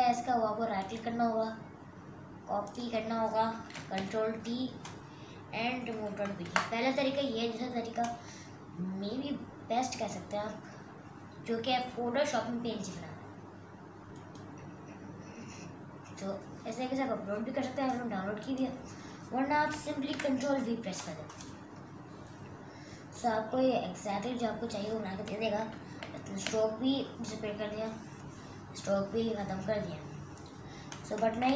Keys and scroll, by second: 4.0 ctrl+t, 5.9 r, 6.4 Return, 20.1 ctrl+v.